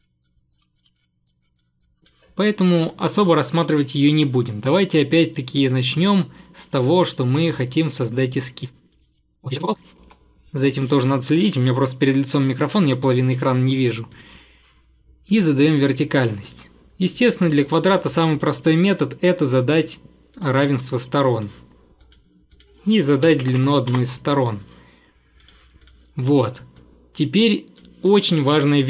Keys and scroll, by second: 0.7 Delete, 0.9 Delete, 10.0 Escape, 10.1 Escape, 23.0-24.1 typing.